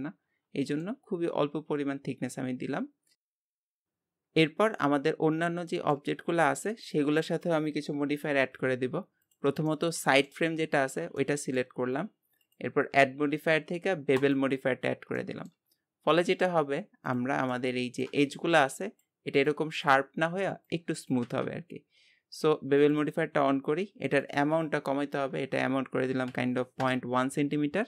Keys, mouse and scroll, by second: 0.7-3.1 shift+middle drag, 3.1 scroll down 4, 3.9-4.3 scroll up 4, 4.3 scroll down 3, 5.1-5.7 scroll up 2, 5.7 shift+middle click, 6.2-6.6 scroll up 1, 6.8-9.7 drag, 9.7 shift+middle click, 10.4-11.2 scroll up 2, 11.2-12.4 shift+middle drag, 14.3 click, 15.2 shift+middle click, 15.7-17.1 scroll up 1, 17.1 click, 17.5-21.5 shift+middle drag, 22.8-27.8 drag.